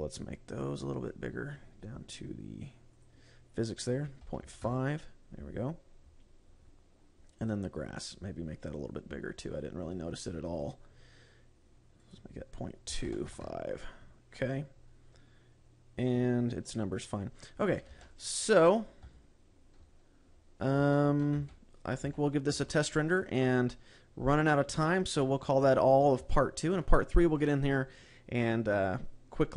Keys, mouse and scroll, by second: 1.5-3.4 scroll down 9, 3.4 click, 6.2-7.8 scroll up 12, 7.8 click, 8.5-9.3 scroll down 7, 11.0-11.8 scroll down 4, 11.8-12.5 scroll down 1, 12.5 click, 14.8-15.5 scroll up 9, 18.3 ctrl+s, 19.5 KP_0, 20.3-20.7 scroll up 8, 21.3 shift+middle click, 21.7 z, 22.1-23.1 scroll down 4, 22.5 z, 23.1 shift+middle click, 25.5 click, 26.4-26.8 scroll down 2, 26.8 shift+middle click.